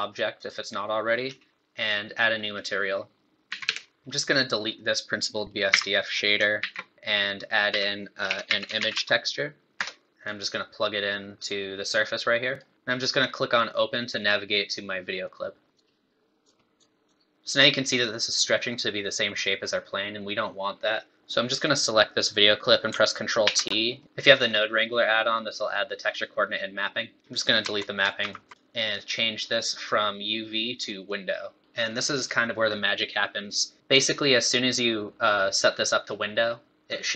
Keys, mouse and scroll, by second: 2.5 click, 3.5 a, 4.0 middle click, 4.0 click, 4.0 scroll down 1, 4.3 middle click, 4.8 click, 5.7 x, 6.5 shift+a, 10.2 click, 11.4 click, 15.2 click, 19.5 scroll up 1, 21.2 click, 22.4 click, 23.5 ctrl+t, 24.0 middle click, 24.1 middle click, 25.2 middle click, 27.1 middle click, 27.3 click, 28.2 ctrl+x, 28.5 click, 28.5 middle click, 31.1 click, 31.6-32.2 scroll down 2, 33.2-33.8 scroll up 1.